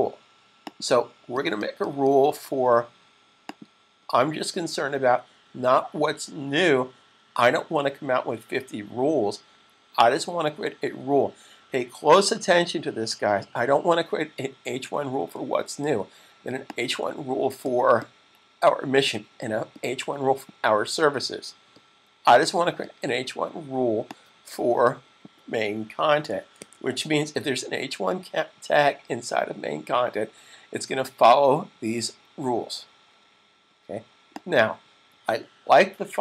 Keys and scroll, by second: 25.9-26.4 typing.